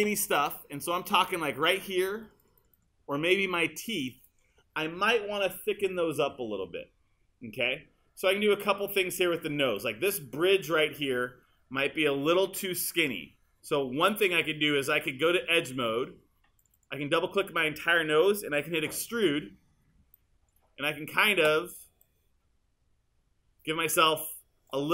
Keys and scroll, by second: 19.2 super+e.